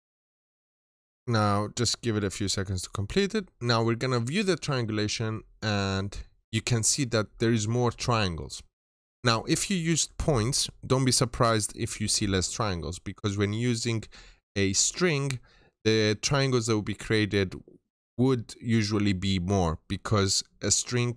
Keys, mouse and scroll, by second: 3.7 click.